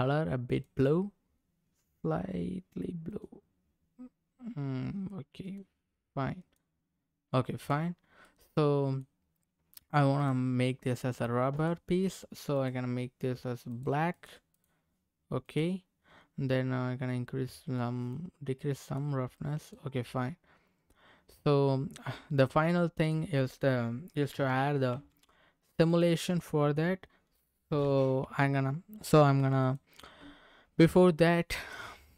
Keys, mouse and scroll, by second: 0.5 click, 7.5 click, 7.9-8.2 scroll down 2, 8.2 middle click, 10.1 click, 11.5 click, 12.5 click, 18.1 click, 19.6 click, 20.0-21.4 middle drag, 21.9 scroll up 1, 22.4 scroll down 2, 23.0 click, 24.3 s, 24.9 y, 25.9 click, 26.3 middle click, 27.7 s, 28.2 x, 29.6 click, 31.2 middle click.